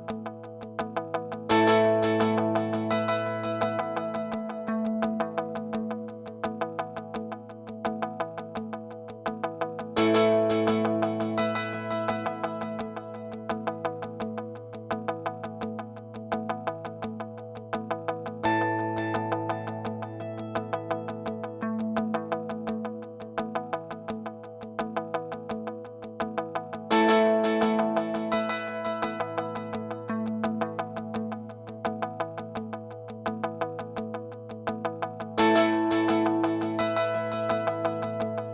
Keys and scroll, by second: 11.1-12.3 typing, 16.0-19.2 typing, 19.8 Return, 21.4-22.9 typing, 23.3 Return.